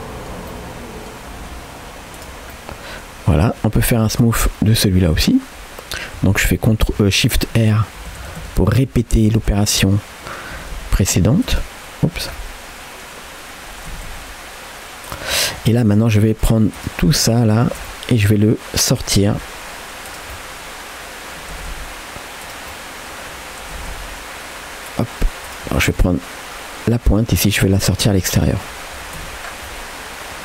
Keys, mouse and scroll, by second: 0.5 middle click, 1.5 g, 2.5 middle click, 3.4 middle click, 4.2 click, 4.8 middle click, 7.6-8.8 typing, 9.6 middle click, 10.6 g, 12.1 scroll up 2, 12.3 middle click, 13.9 r, 15.3 middle click, 15.9 click, 16.3-17.7 shift+drag, 17.9 middle click, 19.3 g, 20.4-21.4 middle drag, 21.6 r, 22.7 middle click, 23.8 r, 25.5 click, 25.8 shift+click, 26.1 middle click, 27.3 g, 28.5 middle click, 29.0-29.7 scroll down 3, 29.2 Tab, 29.7-30.4 middle drag.